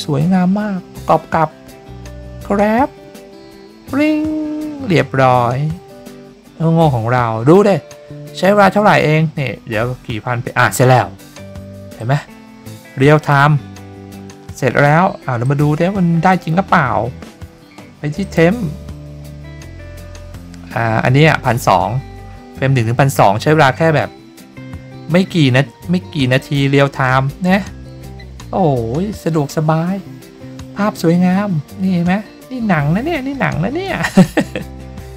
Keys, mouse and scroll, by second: 12.0-13.3 drag, 15.4 click, 18.2 click, 26.2 click, 26.4 click.